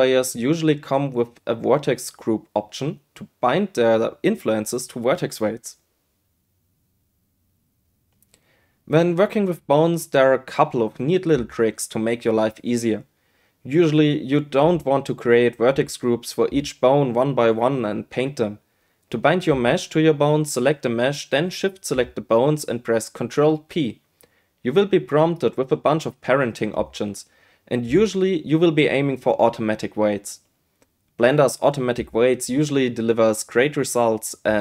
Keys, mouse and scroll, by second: 0.7 space, 1.9 click, 2.6 click, 6.8 a, 6.8 x, 7.2 space, 7.9 shift+a, 8.7 Tab, 8.9 right click, 9.2 right click, 9.5 right click, 9.9 right click, 10.2 Tab, 10.6 shift+a, 13.5-13.9 middle drag, 14.0 Tab, 14.3 a, 14.6 r, 15.5 g, 17.0 s, 17.5 right click, 17.9 right click, 18.0 right click, 18.8 Tab, 19.1 middle drag, 20.2 shift+click, 20.9 shift+click, 22.6 ctrl+p.